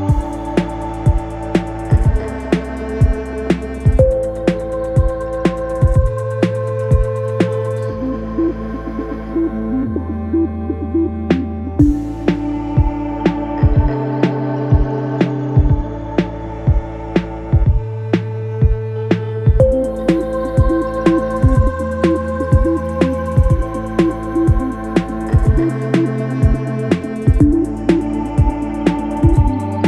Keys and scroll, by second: 1.7 4, 3.7 3, 5.6 ], 7.1 ], 8.5 ], 11.4 ctrl+z, 14.0 4, 20.7 3, 21.4 ], 23.4 4, 24.7 2, 29.1 4.